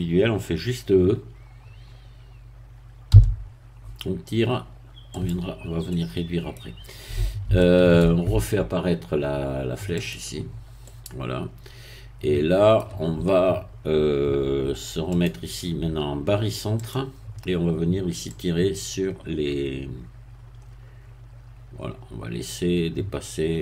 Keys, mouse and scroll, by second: 3.1 e, 5.1 click, 5.9-7.1 middle drag, 7.6 shift+middle click, 10.0 click, 10.8-13.2 middle drag, 15.1 click, 16.8 click, 18.3-23.6 drag.